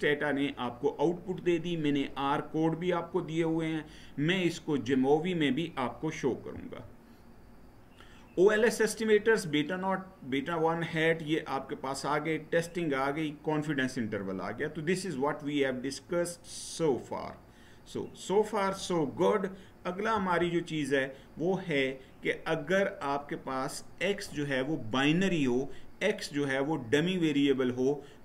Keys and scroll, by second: 6.3 Right, 19.9 Right.